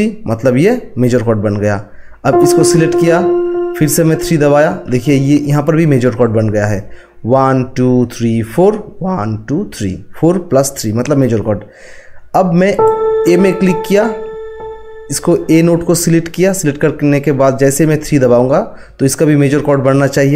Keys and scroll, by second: 4.9 3.